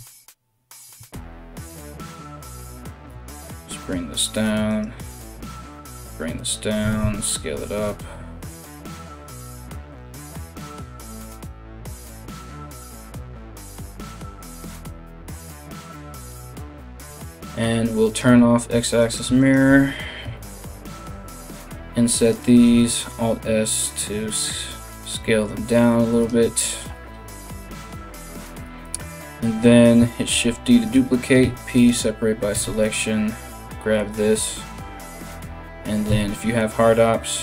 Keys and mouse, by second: 1.7 middle click, 1.7 right click, 2.4 g, 3.5 alt+middle click, 4.3 right click, 4.4-16.3 middle drag, 5.0 g, 6.4 s, 10.2 alt+right click, 11.0 g, 13.6 right click, 14.2 g, 16.7 3, 17.7 click, 18.6 alt+right click, 19.0 alt+shift+right click, 22.2 i, 22.3 alt+s, 25.4-32.4 middle drag, 29.9 shift+d, 31.0 p, 32.1 Tab, 32.4 right click, 32.5-37.4 middle drag, 35.7 q.